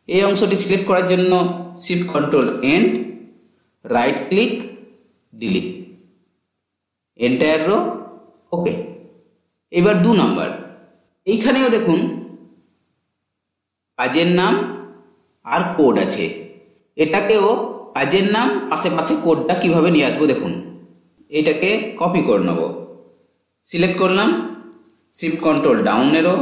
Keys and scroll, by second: 0.6 ctrl+shift+End, 25.1 ctrl+shift+Down.